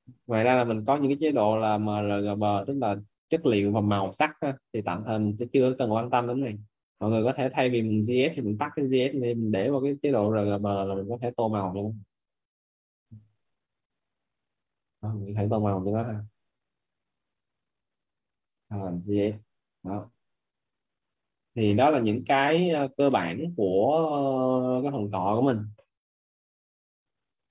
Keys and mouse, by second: 8.3 click, 14.0 click, 15.1 right click, 16.6 click, 19.3 right click, 20.4 click.